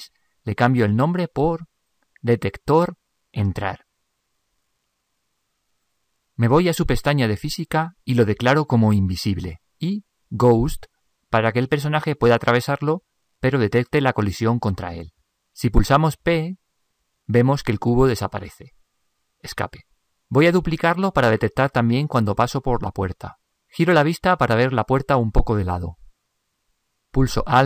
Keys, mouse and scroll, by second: 9.3-12.5 drag, 12.6 click, 17.2 p, 19.8 p, 23.8-27.4 middle drag.